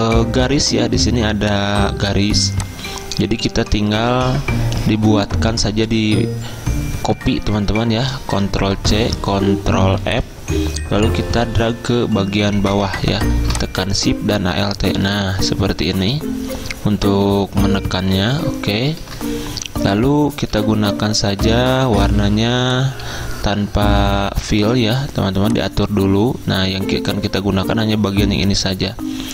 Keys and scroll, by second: 9.0 ctrl+c, 10.1 ctrl+f, 20.6 d.